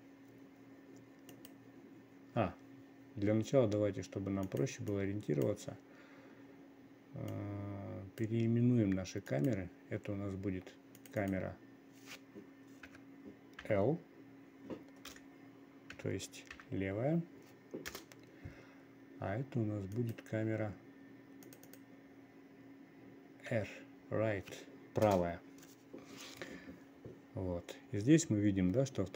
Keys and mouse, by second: 2.0-5.0 drag, 5.6 click, 8.0 click, 9.8 click, 11.7-18.4 drag, 20.4 click, 22.0 click, 22.2-25.6 drag.